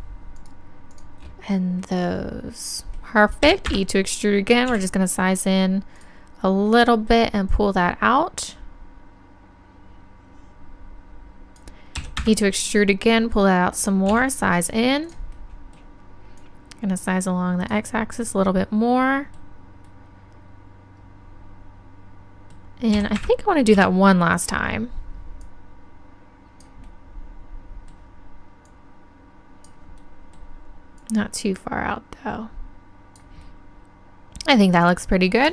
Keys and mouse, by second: 2.2-3.7 drag, 4.7 s, 6.0-9.4 drag, 13.1-15.0 drag, 14.1 s, 15.1-18.5 drag, 18.2 right click, 20.5-23.2 middle drag, 24.4-27.3 drag, 27.3-28.7 middle drag, 28.7-30.8 drag, 30.8-32.9 middle drag, 31.0-32.6 drag, 34.8-35.5 middle drag.